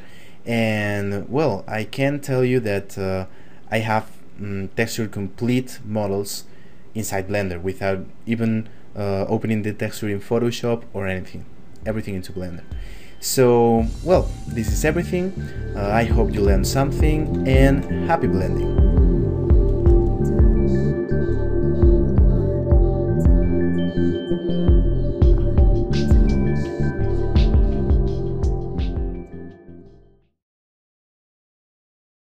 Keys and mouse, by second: 0.1 click, 15.8 shift+middle click, 16.3 ctrl+middle click, 17.2 shift+middle click.